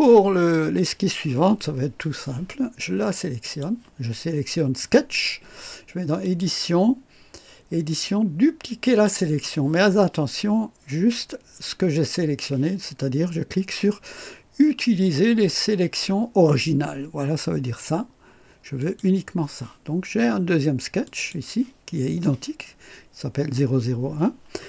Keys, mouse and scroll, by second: 0.0-1.0 right drag, 3.4 click, 6.2 click, 8.8 click, 18.8 click, 21.0 click.